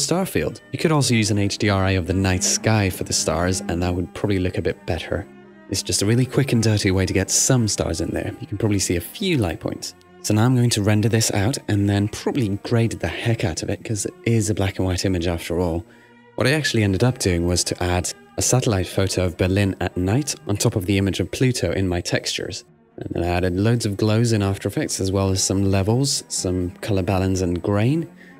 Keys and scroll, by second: 5.7 super+r.